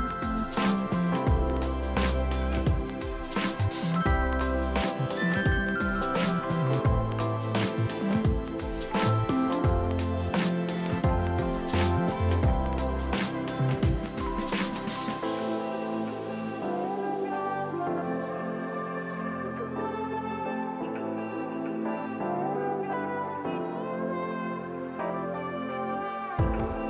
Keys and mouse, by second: 0.0 Escape, 0.3 ctrl+q, 0.4 click, 1.0 click, 1.3 Left, 1.9 Escape, 2.0 ctrl+q, 2.2 click, 2.5 ctrl+shift+x, 2.7 click, 3.1 Left, 4.1 click, 7.8 click, 8.4 ctrl+q, 8.5 click, 9.8 ctrl+q, 9.9 click, 11.5 ctrl+e, 11.6 click, 11.9 ctrl+1, 12.0 ctrl+click, 12.1 right click, 12.2 click, 13.1 Delete, 13.3 click, 14.6 ctrl+x, 14.8 click, 15.1 ctrl+1, 15.2 right click, 15.4 click, 15.6 ctrl+q, 16.0 click, 16.9 ctrl+z, 17.0 click, 19.1 ctrl+e, 19.3 ctrl+click, 19.5 Delete, 21.4 Escape, 21.5 click, 23.4 click.